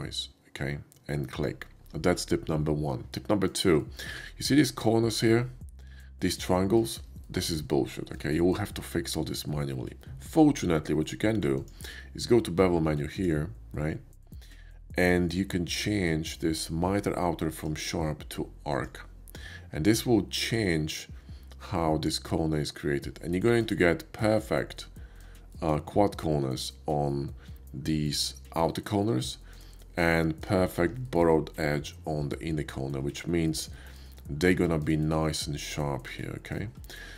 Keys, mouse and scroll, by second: 1.3 click, 3.0 middle click, 3.3 middle click, 4.0-6.2 shift+middle drag, 6.9 middle click, 7.5 shift+middle click, 8.1 shift+middle click, 8.5-10.5 shift+middle drag, 11.6 click, 13.0 click, 17.3 click, 18.6 click, 23.5 shift+middle click, 23.8 shift+middle click, 24.4 shift+middle click, 24.7 shift+middle click, 25.5 shift+middle click, 29.3 shift+middle click, 29.8 shift+middle click, 30.2 shift+middle click, 31.0 shift+middle click, 32.9 shift+middle click, 33.2 shift+middle click, 33.7 shift+middle click, 34.2 shift+middle click, 34.6 shift+middle click, 35.0 shift+middle click, 35.9 shift+middle click, 36.2 shift+middle click.